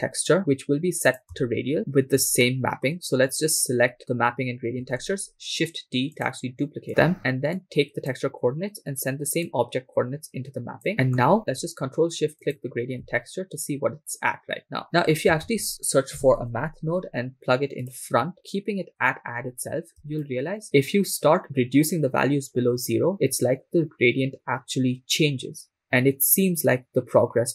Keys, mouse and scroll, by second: 0.4 middle click, 0.4 scroll down 2, 1.1 click, 2.4 shift+middle click, 4.9 shift+d, 6.2 click, 6.9 click, 7.6 click, 9.5 click, 10.9 middle click, 12.7 ctrl+shift+click, 15.0-15.3 scroll up 2, 15.5 shift+a, 20.3 shift+click.